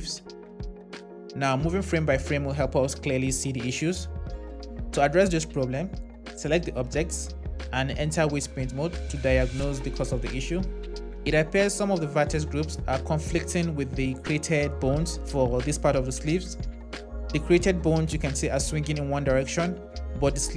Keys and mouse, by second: 1.0 space, 2.3 Right, 2.6 Right, 2.7 Right, 3.0 Left, 6.1 click, 8.2 Tab, 15.4 click.